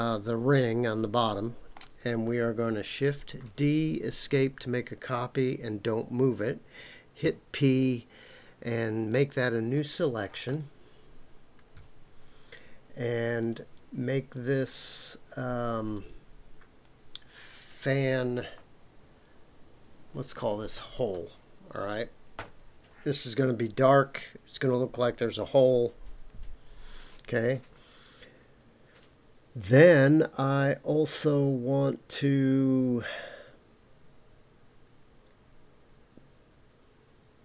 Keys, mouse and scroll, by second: 3.4 shift+d, 4.1 Escape, 7.2 p, 11.7 KP_Decimal, 13.4 click, 14.3 click, 14.6-27.4 drag.